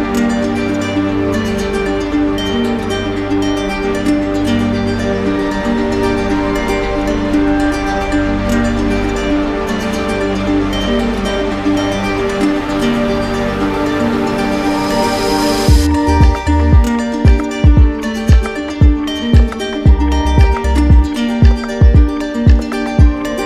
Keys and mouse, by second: 0.6 w, 2.6-4.0 alt+drag, 4.3 right click, 7.1-8.2 drag, 8.9-10.0 right drag, 10.6 z, 12.0-13.8 right drag, 13.2 z, 13.9-15.0 drag, 15.1 right click, 17.9 click, 18.9 right click, 19.6 right click, 19.9 shift+right click, 20.9 right click, 21.7 right click, 21.7 z.